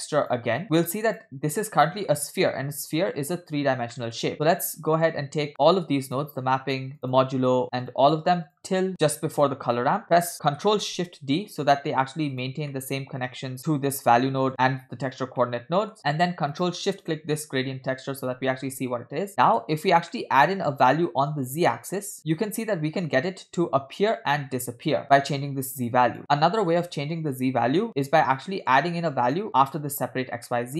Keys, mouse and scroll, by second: 0.6-1.3 drag, 0.6 middle click, 0.6 scroll down 2, 1.8 scroll up 2, 1.9 middle click, 3.6 scroll down 2, 4.0 middle click, 4.3 middle click, 4.3 scroll down 1, 5.5 click, 6.1 shift+click, 7.1 shift+drag, 7.9 shift+drag, 8.5 shift+drag, 10.0 middle click, 10.0 scroll down 2, 10.7 ctrl+shift+d, 12.7 middle click, 13.3-13.9 scroll up 4, 13.7 middle click, 14.3 middle click, 15.4-16.0 middle drag, 16.6 click, 17.2 ctrl+shift+click, 19.4 middle click, 19.4 scroll up 1, 20.1 middle click, 21.4-25.9 drag, 26.1-27.4 drag, 28.4 middle click, 28.4 scroll down 2, 30.6 middle click.